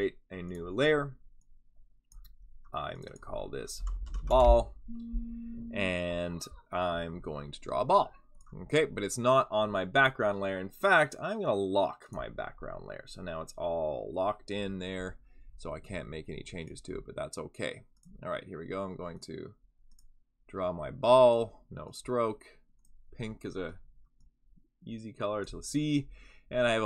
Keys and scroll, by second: 3.5-4.6 typing.